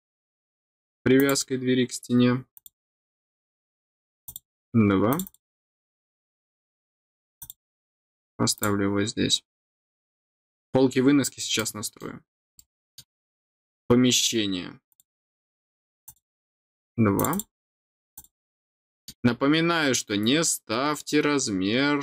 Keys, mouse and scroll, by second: 1.1 click, 2.5 click, 4.2 click, 5.1 click, 5.2 click, 7.3 click, 8.1 scroll down 1, 8.5 click, 9.8 middle click, 10.2 scroll down 1, 11.5 middle click, 12.5 middle click, 14.9 click, 16.0 click, 17.1 click, 17.3 click, 18.1 click, 18.7 middle click, 19.3 scroll down 1.